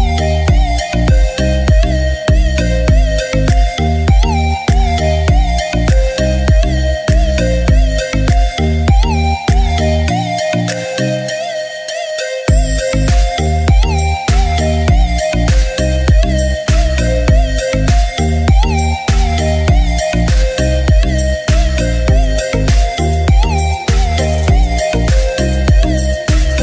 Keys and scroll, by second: 3.0 ], 7.0 typing, 17.4 ctrl+shift+a.